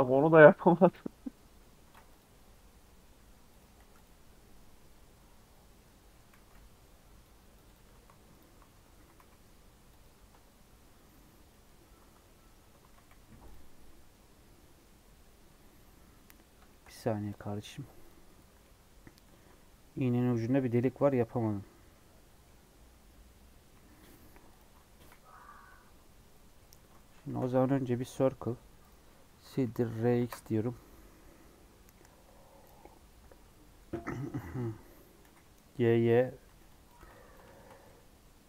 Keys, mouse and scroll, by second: 1.1 scroll up 1, 1.3 middle click, 1.8 ctrl+r, 3.7 3, 3.9-4.9 drag, 4.9-5.8 scroll up 2, 5.8 middle click, 6.3 x, 7.8 2, 8.3 alt+click, 8.9 e, 10.3 Tab, 10.6 scroll down 4, 10.8 middle click, 11.2 scroll up 2, 11.5-12.6 middle drag, 12.6 Tab, 12.8 a, 13.1 m, 14.0 Tab, 14.4 middle click, 15.0 scroll down 3, 15.1 middle click, 15.5 scroll up 1, 15.7-16.1 scroll down 1, 16.6 shift+middle click, 17.3-18.6 drag, 18.6-21.6 middle drag, 24.4 click, 24.9 KP_1, 25.8 KP_3, 26.4-26.9 scroll down 1, 26.9 shift+middle click, 27.2 shift+a, 29.3 r, 34.5-35.2 scroll up 2, 35.2 g, 36.4 Tab, 36.6 click, 36.9 alt+z, 37.1 click, 37.4 shift+middle click, 37.8 g.